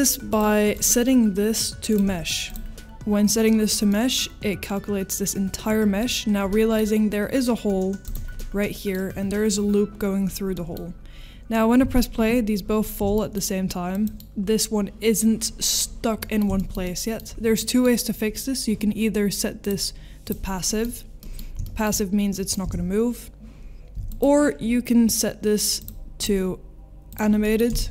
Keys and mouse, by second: 0.3 click, 0.7-1.9 drag, 2.4 click, 3.9 middle click, 6.5 middle click, 8.0 click, 8.3-8.9 middle drag, 10.5 middle drag, 11.8 space, 13.2 middle click, 13.2 space, 16.2 middle drag, 16.6 shift+middle drag, 16.8 middle click, 17.6 middle click, 19.6 click, 20.7 middle click, 21.2 middle click, 21.6 shift+middle drag, 22.3 middle click, 22.9 space, 25.8 click, 25.8 space, 27.4-27.9 middle drag.